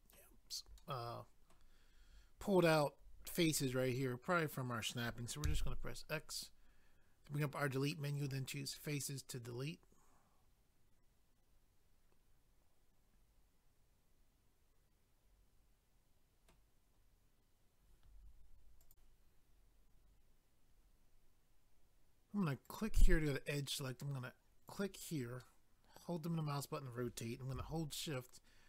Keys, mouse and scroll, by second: 0.8 middle click, 8.1 click, 8.2 click, 8.7 middle click, 18.8 click, 18.9 click, 22.7 click, 24.7 click, 24.8 click, 25.4 middle click.